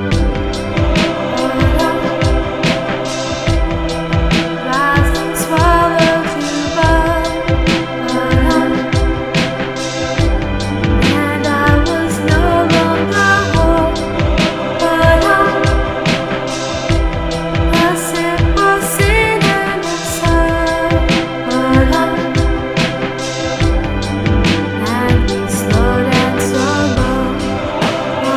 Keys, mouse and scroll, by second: 2.1 click, 5.7 click, 6.8 click, 10.0 click, 13.7 Tab, 17.5 ctrl+alt+p, 21.4 F9.